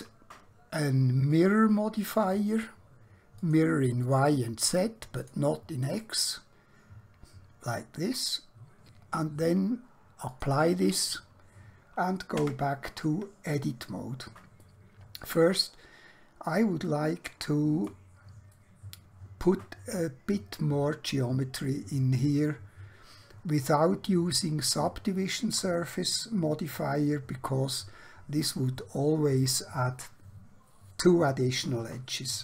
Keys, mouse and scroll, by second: 6.1 middle click, 10.3 click, 12.4 Tab, 13.7 scroll down 1, 14.0 scroll up 1, 14.7 shift+middle click, 15.7 middle click, 16.9 shift+middle click, 18.6 middle click, 23.7-24.2 scroll up 1, 24.2-24.7 scroll down 1, 24.9 shift+middle click.